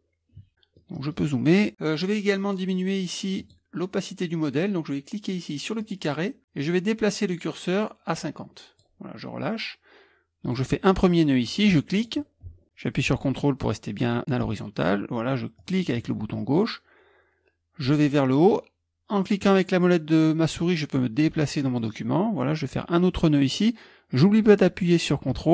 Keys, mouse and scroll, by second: 3.4 click, 5.8 click, 7.1-8.9 drag, 8.9-11.0 middle drag, 10.4 click, 11.9 click.